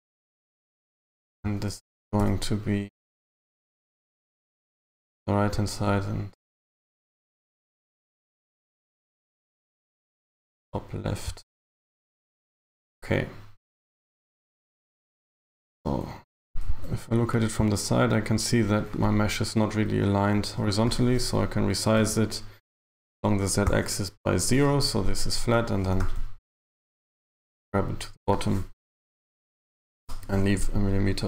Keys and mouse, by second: 2.3 n, 3.4 n, 16.7 KP_3, 20.4 a, 22.0 s, 25.9 g, 29.2 g.